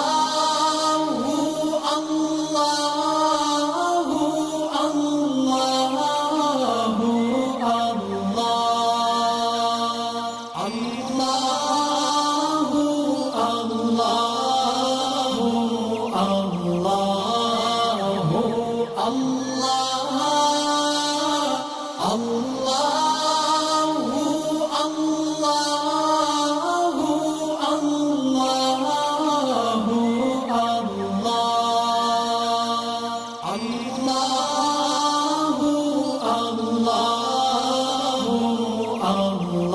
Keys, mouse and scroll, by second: 0.2 scroll down 2, 0.9 space, 1.0 click, 1.9 space, 2.0 click, 4.1 click, 11.9 click, 12.0 click, 17.1 alt+scroll down 1, 17.8 alt+scroll up 1, 18.5 alt+scroll up 1, 19.1 click, 20.5 ctrl+shift+], 21.0 alt+scroll down 1, 21.5 space, 21.5 click, 21.5 click, 22.7-23.8 alt+click, 24.0 right click, 25.3 click, 30.7 alt+scroll up 1, 31.5-32.3 drag, 34.3-35.6 alt+scroll down 2, 35.6 scroll up 2, 36.5 alt+Num_Lock, 36.5 alt+scroll up 1, 36.5-36.9 alt+scroll down 2, 36.9 space, 37.0 click, 37.9-38.3 alt+click, 38.5 space, 39.5-39.7 scroll up 2.